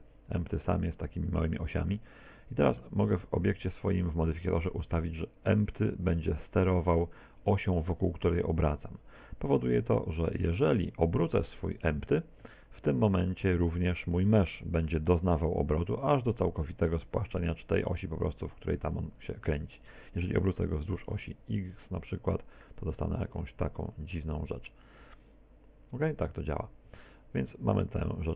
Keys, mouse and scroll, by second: 2.3 middle click, 3.0 right click, 5.0 click, 5.8 click, 10.8 right click, 12.5 r, 20.7 r, 28.0 x.